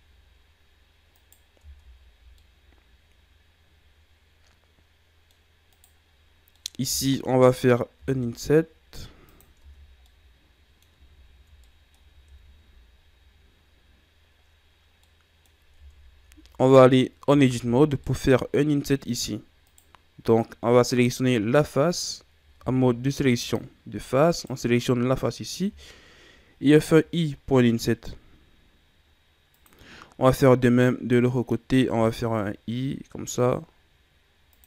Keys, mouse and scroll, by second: 1.1 right click, 1.5 Tab, 2.3-5.3 middle drag, 5.6 right click, 6.5-7.8 middle drag, 7.8 i, 9.5 Tab, 9.7 scroll down 2, 9.9-11.0 middle drag, 11.0 ctrl+z, 11.5 middle click, 12.2 ctrl+z, 13.5-14.6 scroll up 2, 14.6-14.9 scroll down 1, 14.9 middle click, 15.7 Tab, 17.2 Tab, 17.9-19.6 middle drag, 19.6 right click, 22.5 ctrl+Tab, 24.2 right click, 30.6 right click.